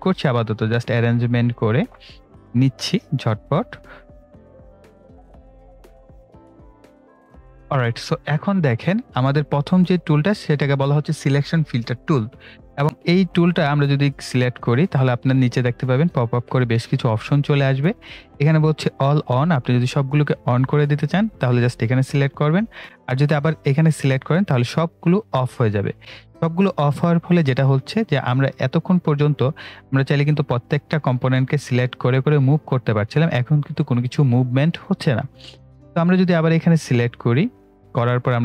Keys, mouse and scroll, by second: 4.9 ctrl+scroll up 1, 5.0 click, 5.9 ctrl+z, 6.1 click, 6.5 Delete, 6.7 click, 26.0 click, 31.0-38.4 drag.